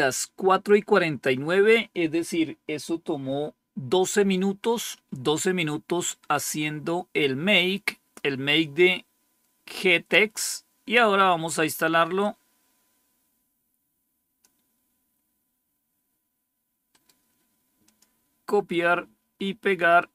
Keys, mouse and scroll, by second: 6.5-7.8 scroll down 2, 12.1-15.2 drag, 16.8 right click, 17.7 click, 19.8 right click.